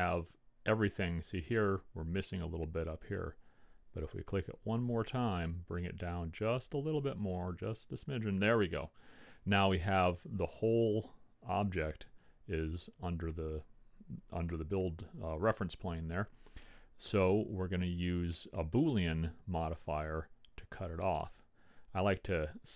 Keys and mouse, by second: 0.2-1.8 drag, 7.9-9.6 drag, 14.7 middle click, 15.4-16.6 drag.